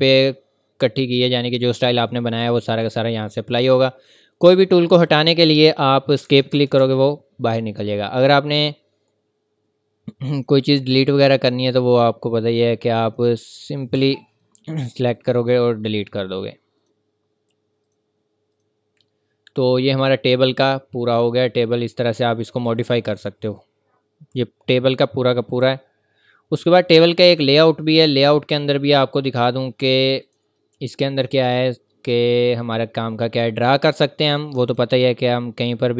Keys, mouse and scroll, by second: 6.2 click, 6.2 Escape, 7.4 click, 10.3 click, 13.9 Escape, 14.4 click, 15.1 right click, 16.8 click, 19.2-19.8 scroll up 1, 19.8-20.5 scroll down 1, 24.9 scroll down 1, 24.9 click, 30.2 click, 34.6 click.